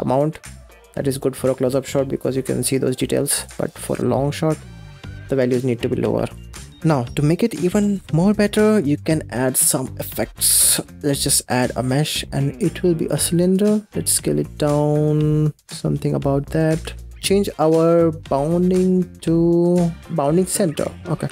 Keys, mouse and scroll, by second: 0.4-3.2 scroll down 2, 3.2 click, 4.5-5.1 scroll down 6, 5.2-5.5 scroll up 9, 6.2 shift+click, 10.4 scroll up 3, 10.8 middle click, 11.0 shift+a, 13.3 scroll down 2, 13.9 s, 14.1 s, 17.0 g, 17.5-20.0 drag.